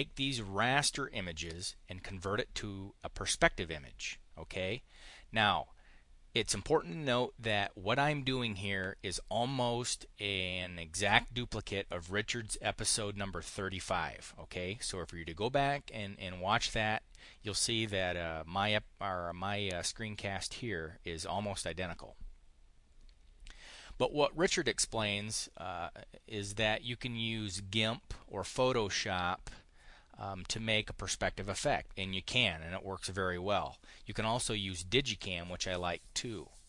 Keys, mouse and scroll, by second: 0.4-1.4 drag.